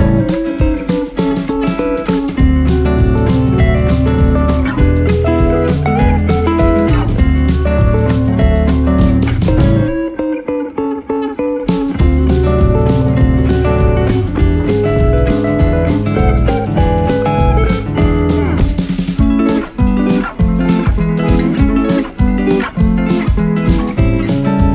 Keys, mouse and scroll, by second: 3.1 d, 12.3 typing, 16.9 d, 17.2-17.5 alt+scroll down 1, 20.1 ctrl+s.